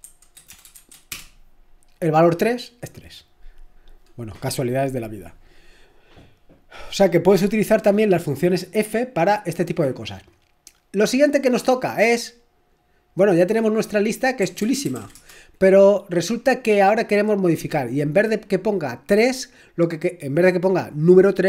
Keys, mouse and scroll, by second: 0.0-1.1 typing, 14.2-15.4 typing, 17.9 typing.